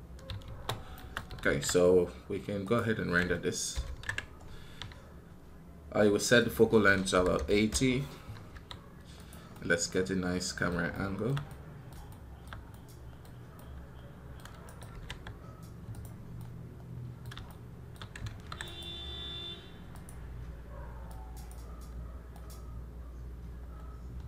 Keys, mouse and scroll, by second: 14.5 right click, 18.5 right click.